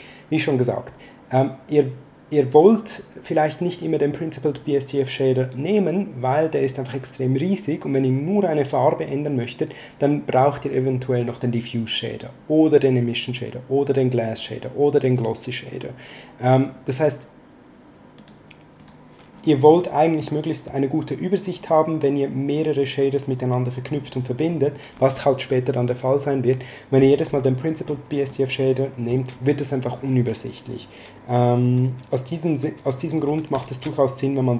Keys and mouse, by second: 18.1 click, 20.1 middle click, 28.3 middle click, 33.2 x, 33.6 shift+a.